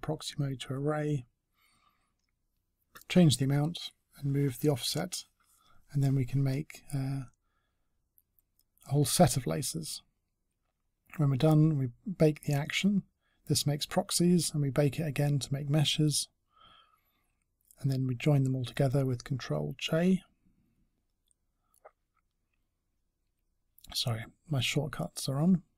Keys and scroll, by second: 22.9 ctrl+j.